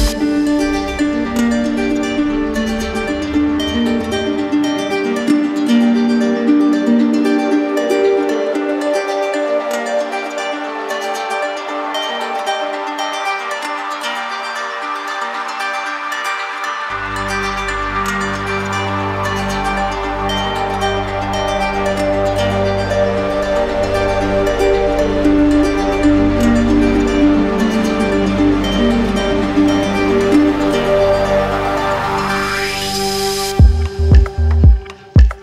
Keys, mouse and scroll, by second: 1.5 click, 2.3 middle click, 3.1 middle click, 4.1 click, 4.8 shift+click, 7.1 click, 7.3 ctrl+z, 8.3 right click, 10.2 click, 13.1 click, 13.3 ctrl+z, 16.1 click, 16.3 ctrl+z, 22.1 click, 22.5 ctrl+z, 28.1 click, 29.6 alt+click.